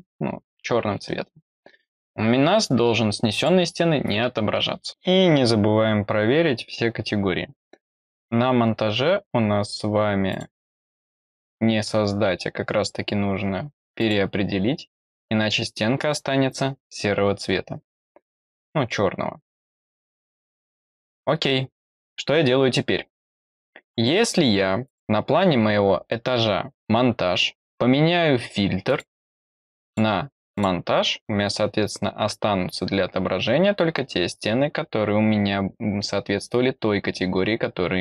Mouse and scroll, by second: 3.3 click, 10.2 click, 13.9 click, 20.8 click, 24.8 click, 28.8 click, 29.8 click, 30.4 click.